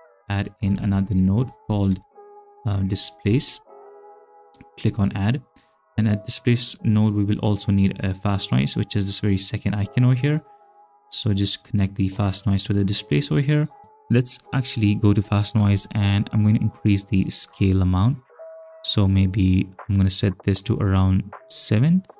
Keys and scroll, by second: 0.7-3.4 typing.